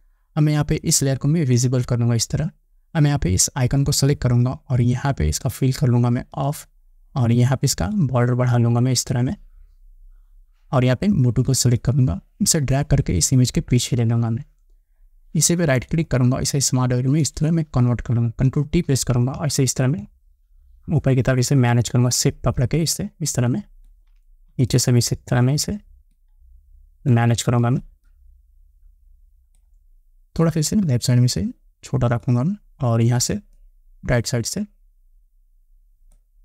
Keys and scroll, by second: 19.1 ctrl+t.